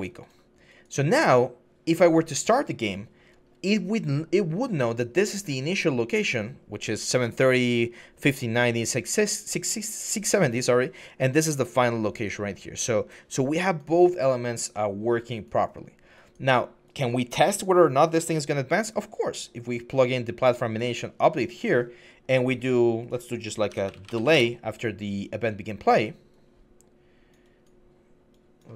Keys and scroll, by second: 23.5-23.9 typing, 24.1 Return.